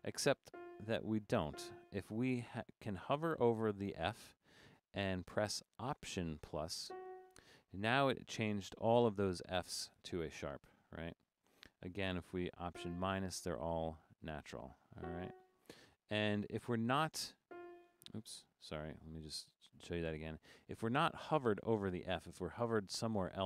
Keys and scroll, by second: 0.0 Left, 0.3 Left, 0.5 -, 0.8 Left, 0.9 Left, 1.1 Left, 1.5 -, 2.2 Down, 2.5 Down, 3.3 Down, 9.0 Right, 9.2 Right, 9.4 Right, 9.7 Right, 10.1 Right, 10.4 Left, 10.6 Left, 10.8 Left, 11.0 Left, 11.1 Left, 12.7 alt+-, 14.1 Up, 15.0 alt++, 17.5 -, 18.9 typing, 19.0 super+z, 19.4 super+z, 20.7 Down, 21.6 Up, 21.7 Up, 21.8 Up, 22.0 Up, 22.2 Up, 22.5 Down, 22.8 Up, 23.0 Up, 23.3 Down.